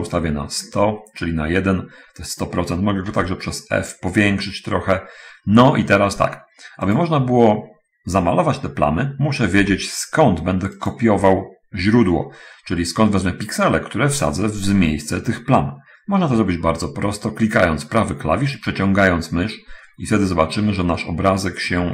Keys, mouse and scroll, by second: 3.4 f, 7.1 click, 10.0 f, 11.2 click, 19.0-21.9 right drag.